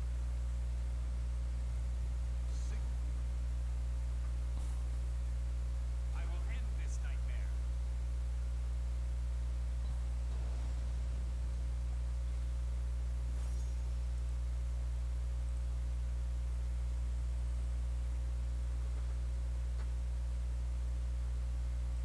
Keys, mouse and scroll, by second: 11.7 r, 15.4 click, 21.9 click.